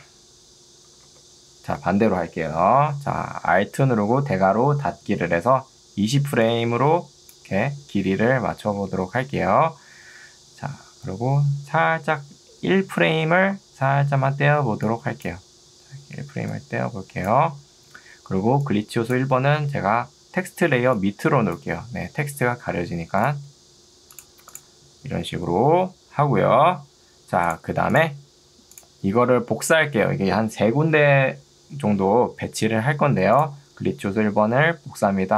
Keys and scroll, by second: 1.2 ctrl+z, 6.2 ctrl+2, 8.8 Escape, 18.6 ctrl+2, 19.6 Escape.